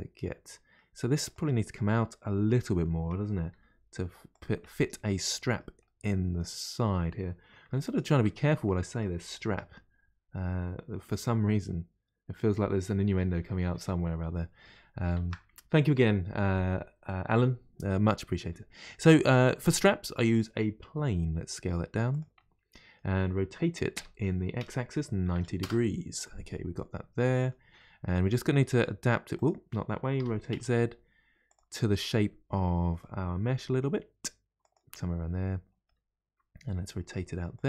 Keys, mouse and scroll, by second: 1.2 click, 2.6-3.5 middle drag, 3.5 g, 4.6-7.8 middle drag, 7.8 shift+right click, 8.7-11.7 middle drag, 15.2 shift+a, 19.3-21.0 middle drag, 21.0 s, 22.4-24.0 middle drag, 24.0 r, 26.2-28.6 middle drag, 28.6 r, 30.2 r, 31.8-33.5 middle drag, 33.5 r, 35.0-36.6 middle drag, 36.6 r.